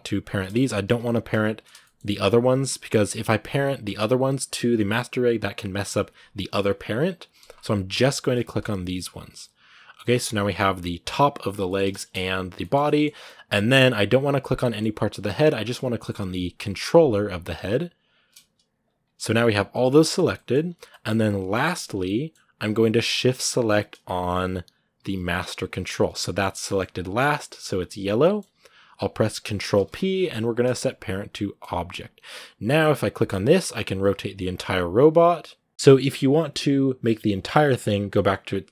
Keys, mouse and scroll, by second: 0.1 shift+right click, 0.2 middle click, 0.6 g, 1.6-7.4 shift+middle drag, 7.4-7.7 scroll up 2, 7.7 g, 8.5 shift+right click, 8.8 g, 9.2 middle click, 10.0 g, 11.4 scroll down 1, 11.5-12.9 middle drag, 12.9 scroll down 2, 13.0-17.8 middle drag, 17.8 shift+right click, 18.2 g, 18.8-19.5 scroll down 1, 19.5 middle click, 19.9 scroll up 2, 20.1 middle click, 21.1 scroll down 2, 21.3-25.6 middle drag, 25.6 shift+right click, 26.4-31.5 middle drag, 31.5 ctrl+p, 32.0-32.8 scroll down 2, 32.8 right click, 33.2 r, 35.7-38.7 middle drag.